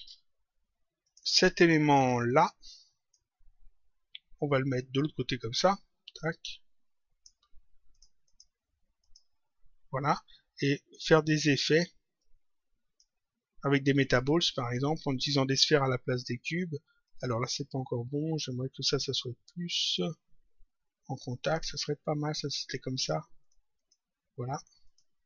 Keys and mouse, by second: 1.0 click, 2.2 click, 4.7 click, 7.8 click, 10.5 click, 12.1 click, 14.0 click, 17.0 click, 19.9 click, 23.4 click, 24.8 click.